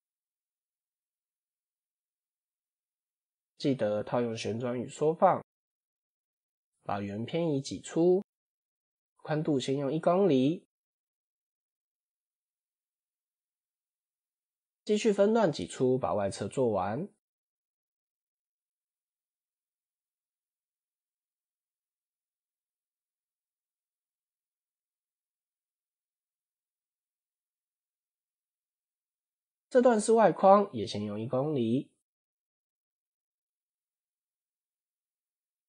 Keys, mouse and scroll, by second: 0.0 s, 3.8 ctrl+a, 4.8 Tab, 6.0 ctrl+e, 8.6-10.2 drag, 11.8 click, 12.6 scroll down 2, 13.3 alt+click, 14.5 ctrl+e, 17.7-19.7 drag, 20.0-20.3 scroll up 3, 20.4 shift+middle click, 20.8 shift+scroll up 1, 22.6-24.6 drag, 25.1 click, 25.7 alt+click, 27.1 ctrl+e, 29.5-30.9 drag, 31.4 click, 32.0 alt+click, 32.7 shift+middle click, 34.2 f, 35.4 i.